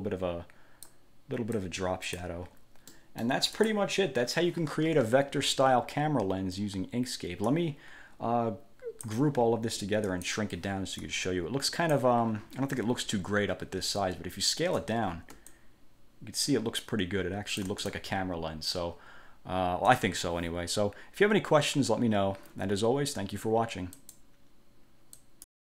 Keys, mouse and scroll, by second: 1.7 click, 3.1 middle click, 3.7 click, 7.6-9.4 drag, 10.2 click, 11.1 click, 15.7-18.2 ctrl+shift+drag, 24.1 click, 25.3 click.